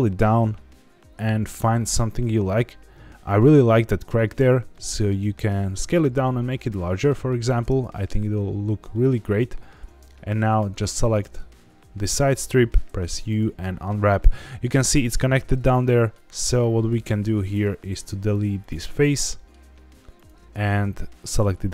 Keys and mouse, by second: 2.4 click, 3.6 middle click, 4.0 Tab, 4.7 middle click, 6.7 middle click, 7.9 shift+middle click, 8.9 middle click, 10.0 Tab, 11.0 alt+click, 12.8 u, 15.5 middle click, 16.5 z, 18.0 x, 19.0 middle click, 20.1 alt+click, 21.5 shift+middle click.